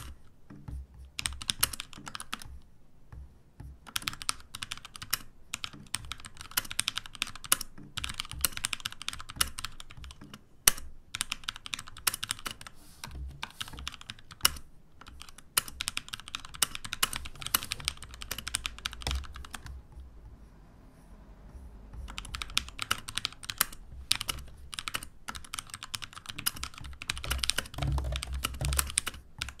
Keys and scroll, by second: 0.0-2.6 typing, 4.8-19.8 typing, 22.1-29.6 typing.